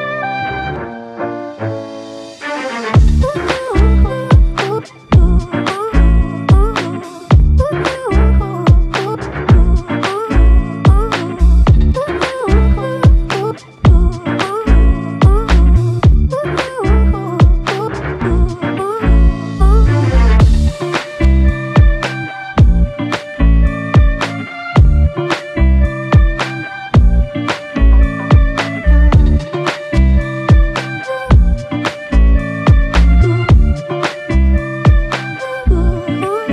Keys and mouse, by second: 3.4 alt+shift+click, 9.5 double click, 13.1 alt+click, 15.3 ctrl+z, 15.8 ctrl+z, 18.3 alt+click, 29.0 double click.